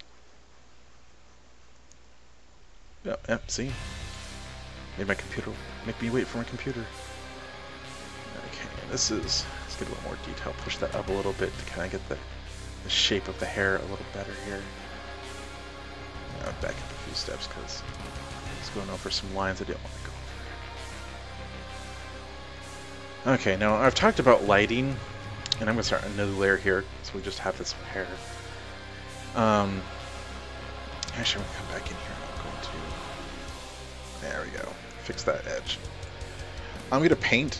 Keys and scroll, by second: 16.8 ctrl+alt+z, 17.0 ctrl+alt+z.